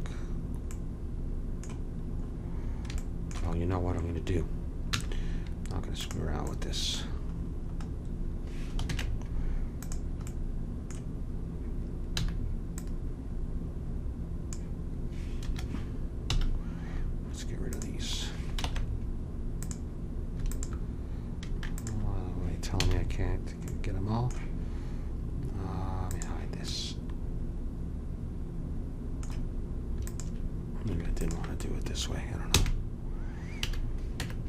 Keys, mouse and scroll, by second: 1.0 middle click, 4.8 z, 8.8 ctrl+Tab, 12.3 c, 16.2 x, 18.6 ctrl+Tab, 20.5-23.3 drag, 22.8 a, 23.3-26.0 middle drag, 26.1-27.8 drag, 26.7-28.0 middle drag, 30.0-32.9 drag, 32.5 f, 33.6 a, 34.2 Tab.